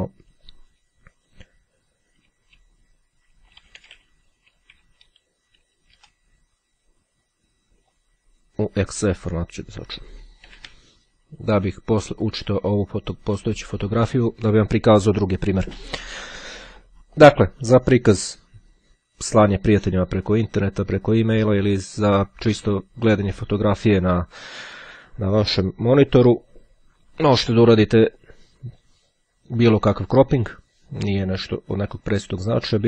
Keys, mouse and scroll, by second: 3.2-4.9 typing, 5.1 Return, 7.9 click, 8.9 click, 9.9 x, 10.2 c, 12.3-13.7 drag, 17.3-19.5 drag, 20.2-24.4 drag, 29.3-32.2 drag, 32.7-32.8 drag.